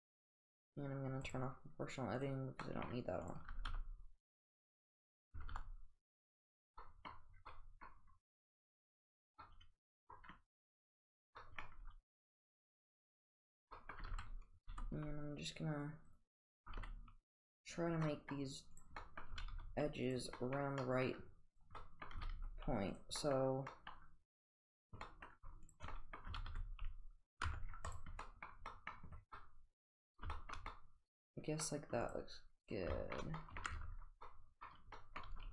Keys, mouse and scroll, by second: 1.3 click, 2.6 middle drag, 3.2 click, 3.5 g, 5.4 g, 6.8 middle click, 7.5 middle click, 7.9 scroll down 1, 9.4-10.1 middle drag, 11.0 click, 11.4 middle drag, 11.8 g, 13.5 click, 13.7 middle click, 14.0 g, 16.6 g, 18.8 click, 19.0 middle click, 19.4 g, 21.0 middle click, 21.6 click, 21.8 middle click, 22.2 g, 24.7 click, 25.0 middle click, 25.7 shift+click, 26.0 middle click, 26.3 g, 27.5 Tab, 27.9 click, 27.9 click, 28.2 middle drag, 28.7 middle drag, 29.4-29.9 middle drag, 30.4 shift+middle drag, 30.7-31.7 middle drag, 32.0 click, 33.0 shift+middle click, 33.4 middle click, 33.7 Tab, 34.3-34.6 middle drag, 35.0 middle click, 35.4 g.